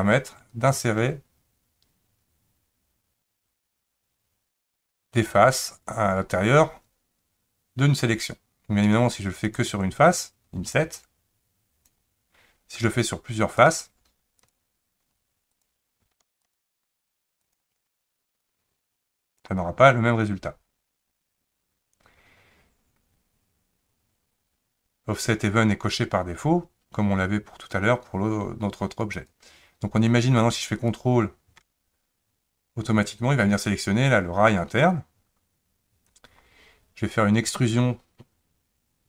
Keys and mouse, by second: 0.5 click, 0.8-5.3 drag, 9.4 click, 10.9-11.9 drag, 14.5 shift+click, 16.5 shift+click, 17.4 shift+click, 18.5 click, 30.8 ctrl+click.